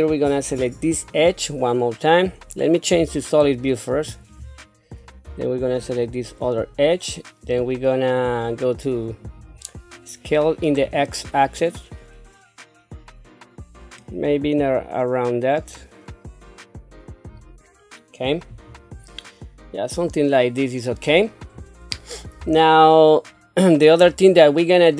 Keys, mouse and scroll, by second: 0.5 click, 3.0 z, 5.8 shift+click, 9.2 click, 10.8-17.3 drag, 18.6-19.0 scroll down 1, 19.1-21.5 middle drag, 21.5 scroll up 1, 22.5-24.0 shift+middle drag.